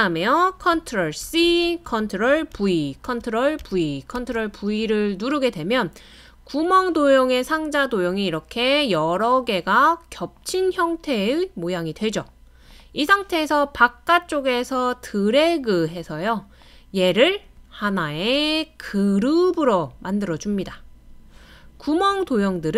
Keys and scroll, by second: 1.2 super+c, 2.5 super+v, 3.1 super+v, 3.6 super+v.